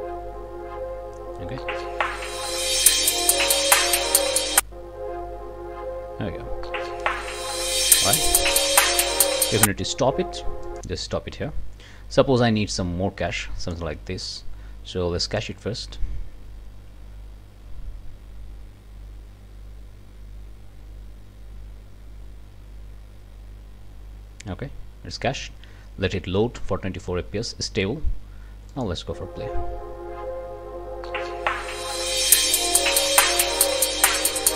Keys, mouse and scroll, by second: 10.7 click, 12.7-13.9 ctrl+drag, 15.4 click, 18.8-24.5 scroll up 2, 28.7 click.